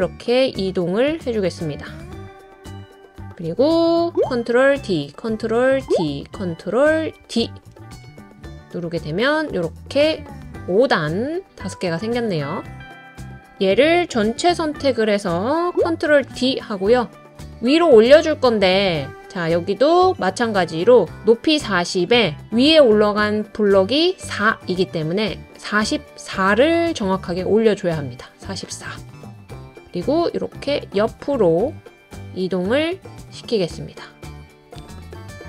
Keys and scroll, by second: 4.7 super+d, 5.8 super+d, 5.8 super+d, 7.2 super+d, 16.0 super+d.